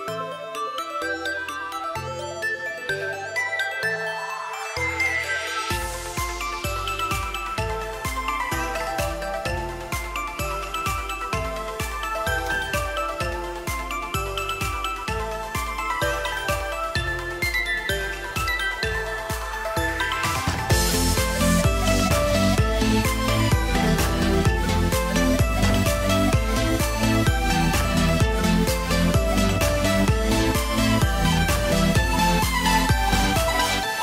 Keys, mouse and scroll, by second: 0.4 shift+middle click, 4.3-4.7 shift+scroll up 3, 4.6 shift+middle click, 4.9 shift+middle click, 11.4 Tab, 11.9 scroll up 3, 12.0 shift+middle click, 12.3 middle click, 13.1 middle click, 13.3 scroll down 4, 13.5 shift+middle click, 13.8-14.4 scroll down 1, 14.4 shift+middle click, 15.3-16.4 scroll up 9, 15.5 shift+middle click, 15.9 shift+middle click, 16.4 shift+middle click, 16.9 2, 17.6 alt+shift+click, 18.8-19.4 scroll down 4, 19.4 shift+middle click, 20.0 KP_3, 20.4 scroll up 2, 20.6 shift+middle click, 27.8 middle click, 28.6-29.1 scroll up 2, 29.1 alt+click, 29.4 scroll down 2, 29.6 shift+middle click, 29.8 middle click, 31.2 s, 32.9 alt+a, 33.0-34.0 scroll down 5, 33.4 Tab, 33.7 middle click.